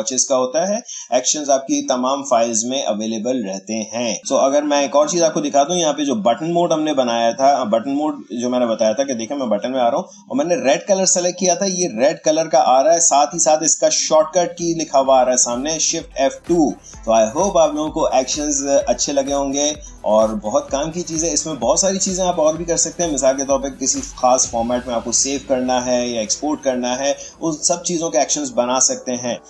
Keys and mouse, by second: 4.2-6.4 drag, 8.8 click, 12.0-17.1 drag.